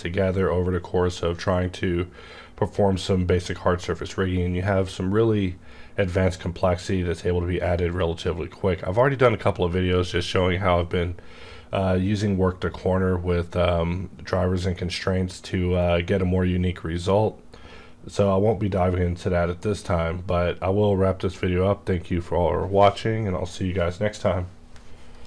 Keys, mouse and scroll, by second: 9.0 right click.